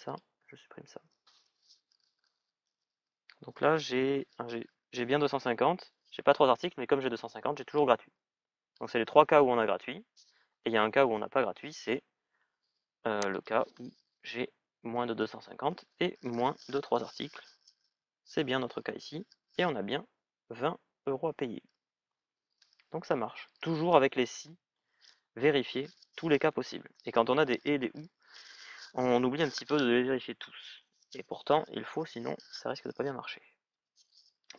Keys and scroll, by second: 14.8 Return.